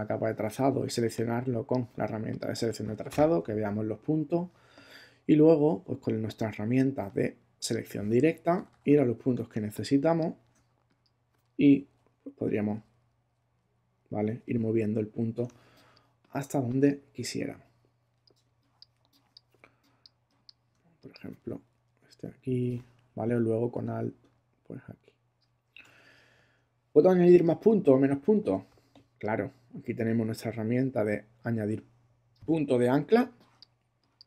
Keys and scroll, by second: 8.5 super++, 9.5 super+space, 10.4 space, 11.9 Down, 12.3 Left, 13.0 Right, 13.7 Left, 13.9 Right, 14.7 Left, 15.4 space, 22.1 Left, 33.2 space.